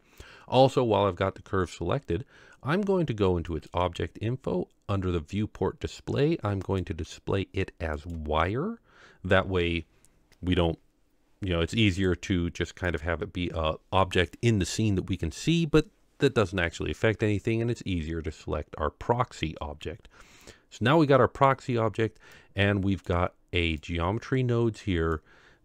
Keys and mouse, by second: 3.5 click, 6.7-8.1 drag, 11.9 click, 12.9 click, 22.3 click, 24.1-25.2 drag.